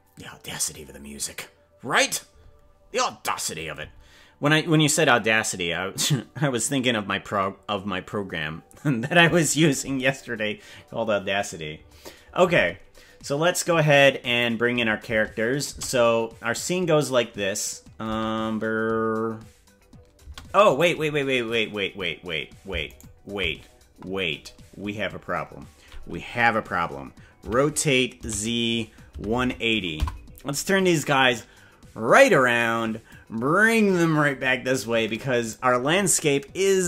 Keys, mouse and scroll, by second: 14.3 click, 15.1 space, 15.7 space, 18.1 space, 20.3 space, 23.1 shift+right click, 27.4 r, 33.0-35.5 drag.